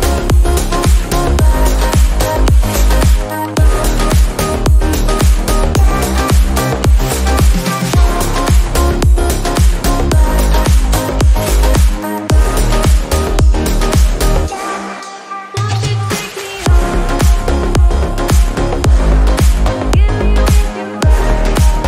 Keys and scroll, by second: 8.4-9.7 typing, 12.4-13.6 typing, 16.3-17.5 typing.